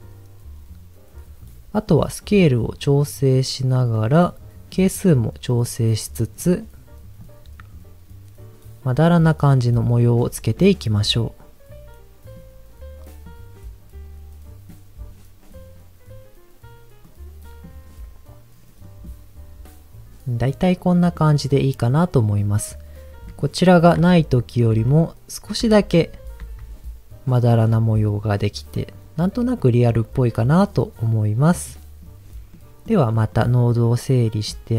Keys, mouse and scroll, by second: 1.9-3.8 drag, 4.7 click, 7.2-9.1 drag, 10.9-12.3 drag, 13.2-14.7 drag, 15.0-16.1 scroll down 2, 17.0 click, 18.8 middle drag, 20.4-21.1 middle drag, 23.2 click, 23.9 m, 28.7-30.6 drag, 31.3 click, 32.5 middle click, 33.3-34.4 drag.